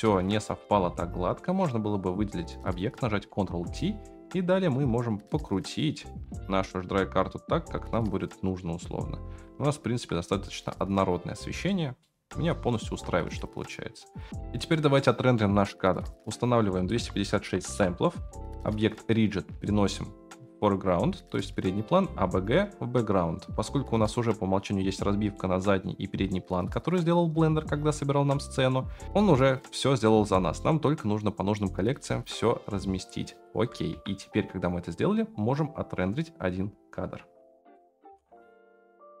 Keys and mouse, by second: 0.6 middle click, 1.4-3.0 drag, 3.3 ctrl+t, 3.9 middle click, 4.8-9.4 drag, 9.7 ctrl+z, 11.6-12.0 shift+middle drag, 13.7 click, 16.8 click, 18.7 click, 19.3-23.5 drag, 24.0-26.8 drag, 28.2-29.3 drag, 33.3 click, 33.9 Delete, 37.7 click, 38.2-39.2 middle drag.